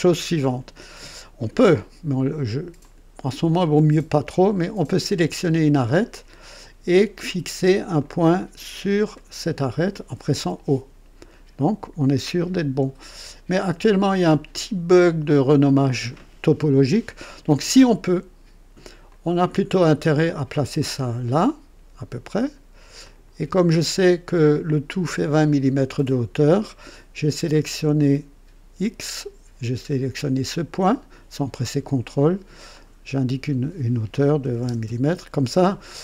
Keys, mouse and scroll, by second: 2.7 click, 5.4 click, 6.8 right click, 7.9 click, 9.1 click, 10.3 o, 13.5 click, 15.2 click, 19.0-20.9 drag, 23.0 click, 25.1 click, 26.6-27.4 right drag, 32.7 click, 34.4 KP_2, 34.6 KP_0, 34.9 KP_Enter, 35.9 scroll down 1.